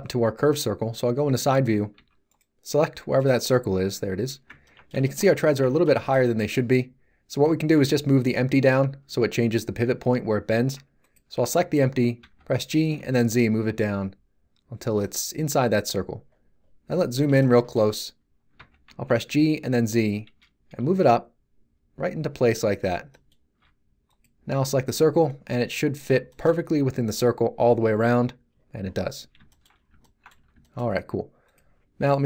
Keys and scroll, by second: 1.9 z, 12.2 g, 12.9 z, 18.5 g, 18.8 z, 30.3 z.